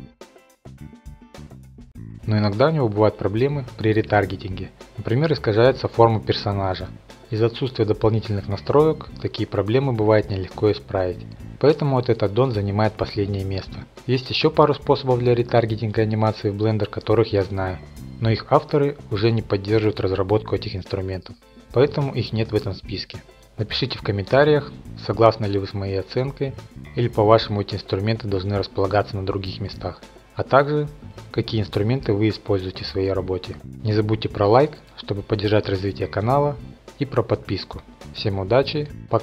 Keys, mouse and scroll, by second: 0.1 middle click, 0.7-1.2 drag, 1.7 click, 2.0 F8, 2.8-4.2 drag, 5.6-6.3 middle drag, 7.1 click, 7.3 middle click, 7.4 middle click, 7.9 shift+middle click, 8.2 middle click, 8.5 middle click, 8.8 click, 9.0 scroll down 1, 9.2 ctrl+Tab, 9.5 click, 9.9 middle click, 10.5 click, 10.9 scroll down 1, 11.3 middle click, 11.8 click, 12.5 click, 13.0 x, 13.4 click, 14.4 alt+g, 15.1 click, 16.1 click, 16.8 click, 17.1 x, 17.5 click, 18.3 alt+g, 19.3 click, 20.2 click, 21.4 x, 21.8 click, 22.4 alt+g, 23.4 click, 24.6-25.7 drag, 25.7 x, 26.1 click, 26.9 alt+g, 28.8 click, 29.8 shift+middle click, 30.2 middle click.